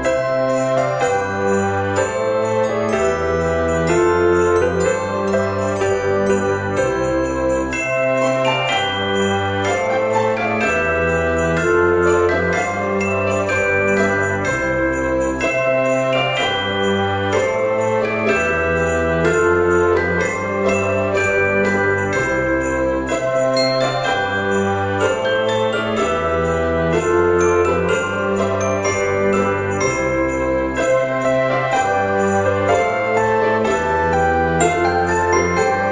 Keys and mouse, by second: 0.5 click, 0.6 g, 0.8 z, 1.5 click, 2.4 shift+d, 2.8 x, 5.1 click, 6.3 l, 7.0 g, 7.3 x, 9.0 click, 10.0 l, 10.5 g, 11.0 x, 12.2 middle click, 14.0 Tab, 15.1 right click, 15.8 click, 16.9 shift+middle click, 18.0 g, 18.2 x, 20.8 click, 21.0 right click, 21.6 click, 22.9 KP_3, 24.5 shift+middle click, 25.2 r, 27.5 click, 27.7 g, 28.0 y, 30.6 click, 30.9 r, 31.5 click, 32.2 middle click, 33.2 KP_1, 34.1 shift+middle click, 34.8 Tab.